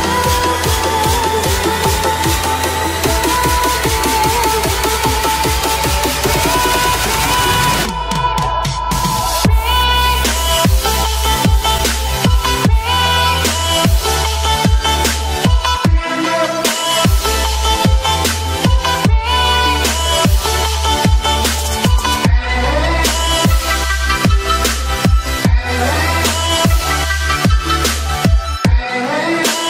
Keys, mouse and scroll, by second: 0.5-2.7 scroll up 1, 2.7 click, 5.4 click, 8.7 click, 18.6 click, 21.3-29.6 drag.